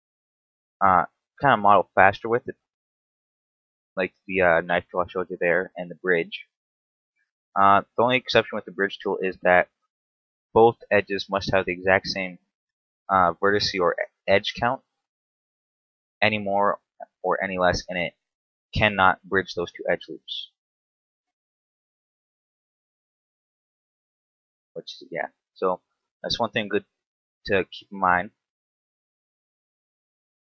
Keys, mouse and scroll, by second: 0.0 shift+right click, 0.6 f, 1.0 right click, 1.4 shift+right click, 2.6 shift+right click, 3.0 shift+right click, 4.4 f, 5.1 middle click, 6.8 right click, 7.3 shift+right click, 8.5 shift+right click, 8.9 shift+right click, 9.6 f, 10.7 middle click, 10.7 f, 12.1 right click, 13.4 shift+right click, 14.3 shift+right click, 14.9 shift+right click, 15.7 f, 16.0-16.3 scroll down 1, 16.3 middle click, 17.5 alt+right click, 18.3 alt+shift+right click, 19.2 f, 19.6 middle click, 21.0 alt+right click, 22.1 middle click, 22.9 middle click, 24.9 shift+right click, 25.4 shift+right click, 25.7 middle click, 27.3 shift+right click, 27.7 shift+right click, 28.6 f, 28.8 scroll down 3, 29.0 Tab, 29.9 KP_7.